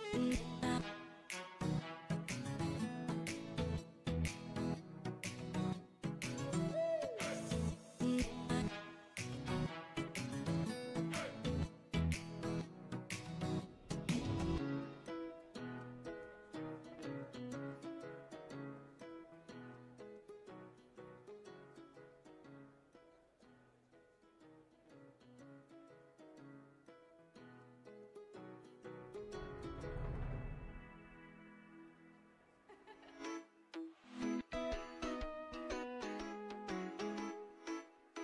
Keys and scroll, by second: 22.5-23.7 typing.